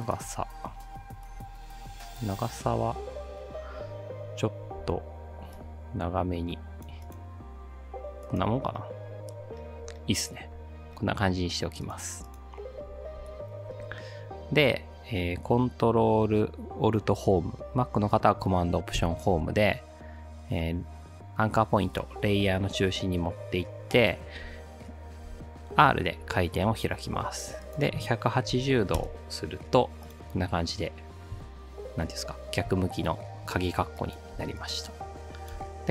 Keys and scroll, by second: 4.8 v, 19.0 ctrl+alt+Home, 25.3 r, 28.3-29.3 typing, 34.4 space, 34.9 space, 35.4 space.